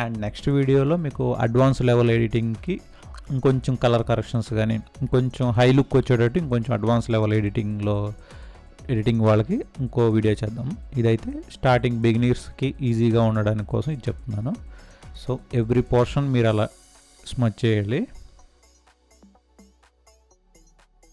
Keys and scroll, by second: 12.1 space.